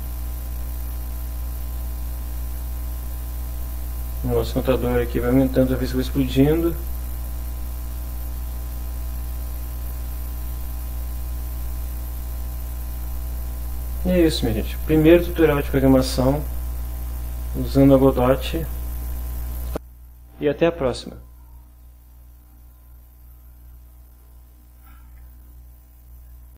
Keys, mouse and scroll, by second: 0.3 click, 1.0 click, 2.3 click, 4.3 click, 5.7 click, 7.0 click, 8.7 click, 11.6 click, 12.5 click, 23.8 alt+Tab, 25.0 alt+Tab, 26.5 click.